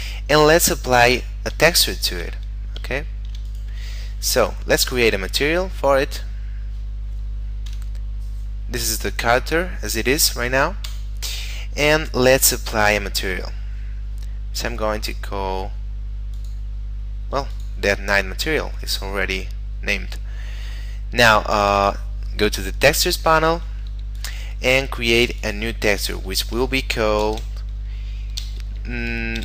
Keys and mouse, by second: 0.0 right click, 1.8 shift+middle click, 2.4 middle click, 3.1 shift+middle click, 3.6 right click, 4.9 click, 7.8 F12, 8.8 middle click, 10.9 Escape, 13.7 middle click, 16.4 click, 19.6 middle click, 21.8 click, 23.1 middle click, 24.2 click, 27.3 shift+d.